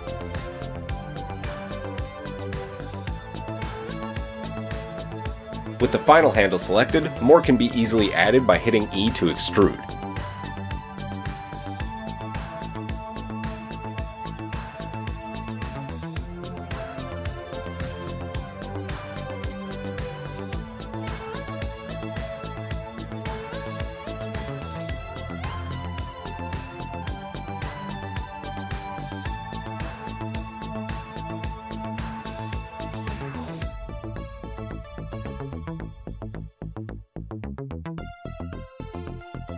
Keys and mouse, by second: 4.7 KP_1, 4.8 Tab, 4.8 KP_1, 4.8 KP_3, 6.1 Tab, 7.9 g, 12.9-20.2 shift+middle drag, 17.8 e, 22.6 KP_3, 25.3-27.4 middle drag, 27.4 click, 27.5-39.5 middle drag, 28.1 KP_3, 34.5 g.